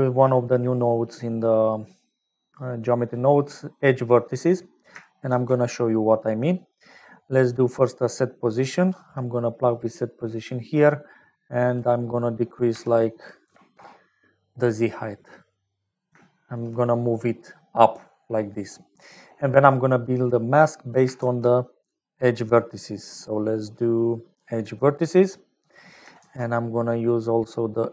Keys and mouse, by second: 0.7 click, 4.8 click, 5.2 shift+a, 11.9-14.3 drag, 15.3 middle click, 16.2 shift+middle click, 16.7-18.5 middle drag, 19.5 middle click, 20.4 middle click, 20.9 click, 21.1 shift+a, 25.5 middle click, 26.1 shift+a.